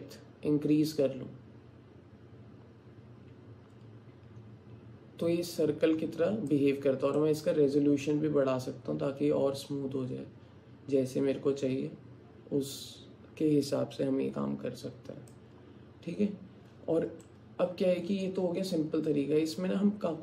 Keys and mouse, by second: 7.2-15.5 drag, 17.3-20.2 alt+drag.